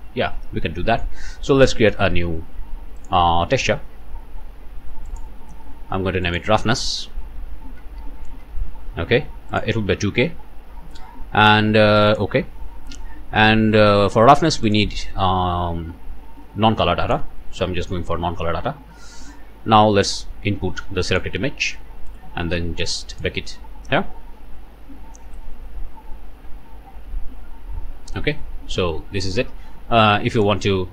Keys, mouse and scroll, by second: 3.0 middle click, 5.1 middle click, 6.3 click, 7.2-8.4 typing, 9.5 click, 12.1 click, 12.6-13.1 scroll down 2, 13.7 scroll down 1, 14.7 click, 17.0 click, 18.2 scroll up 1, 21.1 click, 23.1 click, 30.4 middle click.